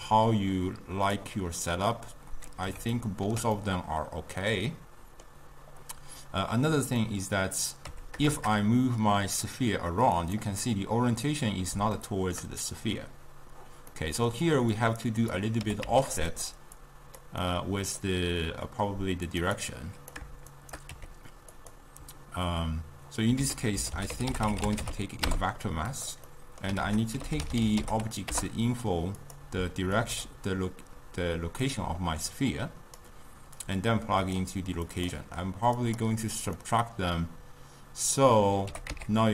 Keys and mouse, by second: 0.1-1.7 drag, 1.7-6.7 middle drag, 7.1-8.0 middle drag, 8.0 g, 10.7-14.8 middle drag, 14.8-15.7 drag, 15.7 g, 16.4 drag, 16.9 click, 17.5-19.4 middle drag, 19.4 click, 19.7 click, 20.6 shift+right click, 21.0 g, 23.5 ctrl+a, 26.4 middle click, 26.9 ctrl+a, 30.1 click, 32.6-36.7 drag, 36.7-38.8 middle drag, 38.8 g.